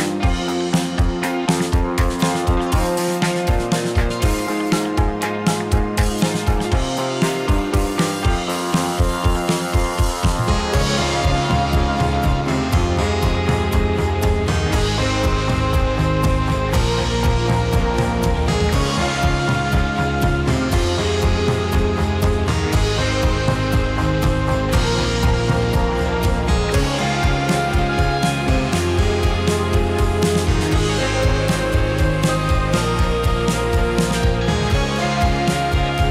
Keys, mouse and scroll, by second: 0.5 click, 0.6 r, 1.2 click, 1.4 r, 2.0 click, 2.1 r, 2.5 click, 2.7-7.9 middle drag, 7.9 click, 8.6 `, 10.1 r, 10.9 click, 11.2 click, 13.2 alt+d, 16.1 s, 17.0 middle click, 18.1-18.6 middle drag, 18.6 s, 19.3 r, 19.8 click, 19.9-20.9 middle drag, 20.9 drag, 21.1-22.3 middle drag, 22.3 r, 23.1 click, 23.2-25.1 middle drag, 25.1 click, 25.3-26.1 middle drag, 26.1 drag, 26.2-27.1 middle drag, 27.8 middle click, 28.4 click, 28.6-29.0 middle drag, 29.0 `, 29.7-31.4 middle drag, 31.4 click, 32.0 r, 32.5 click, 32.6-33.0 middle drag, 33.0 drag, 33.2 click, 33.6 `, 34.7 alt+d.